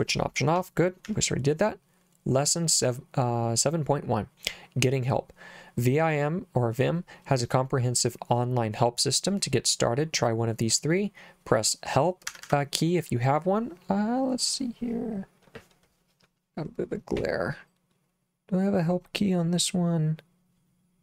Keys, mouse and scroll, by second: 0.6 j, 1.1 j, 12.3 Escape.